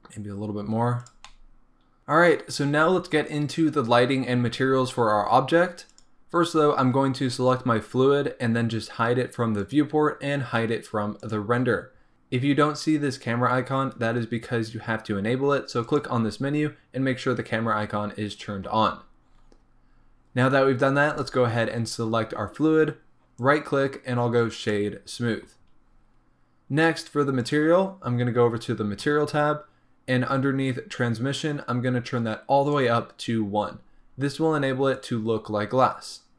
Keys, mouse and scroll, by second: 1.2 middle click, 1.2 scroll down 2, 2.0 shift+middle click, 6.1 click, 9.6-21.3 drag, 24.8-30.0 right drag, 30.0-31.5 scroll down 1, 31.5-36.3 drag.